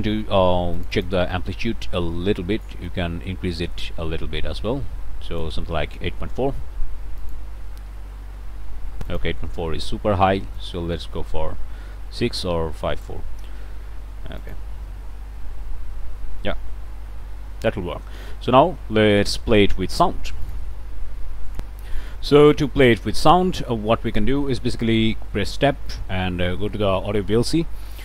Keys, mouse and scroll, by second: 0.8 click, 2.9-5.6 drag, 7.2 click, 9.1 click, 10.6-14.7 drag, 20.5 click, 21.5 click, 22.7 click, 23.1 scroll up 1, 23.9 scroll up 1, 24.2 click, 25.2 shift+Tab, 26.4-28.0 typing.